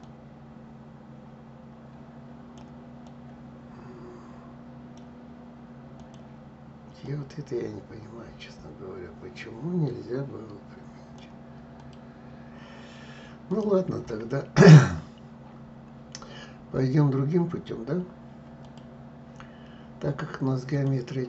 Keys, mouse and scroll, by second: 6.7-9.7 drag, 11.4 click, 13.1 click, 18.3 click, 20.4-21.2 drag.